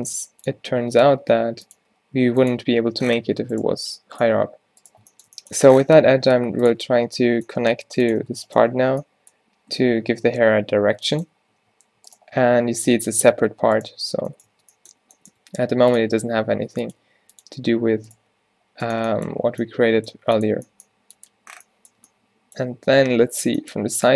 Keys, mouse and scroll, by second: 0.9 Tab, 1.1 Tab, 1.3 r, 1.8 g, 2.7 Tab, 4.4 Tab, 6.1 e, 7.6 g, 8.3 Tab, 11.6 Tab, 12.8 Tab, 13.0 Tab, 13.2 g, 14.0 Tab, 14.5 Tab, 15.5-18.4 typing, 23.1 z, 23.9 g.